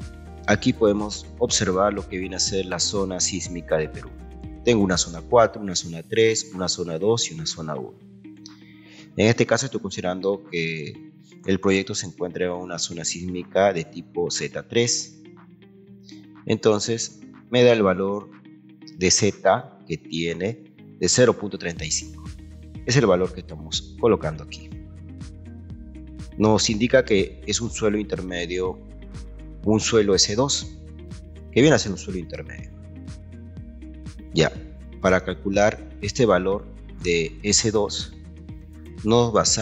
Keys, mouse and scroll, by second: 2.2-4.2 ctrl+right drag, 14.6 ctrl+1, 15.9 ctrl+2, 17.5-18.9 ctrl+drag, 22.0 Escape, 22.5 scroll up 1, 23.9 click, 26.8 click.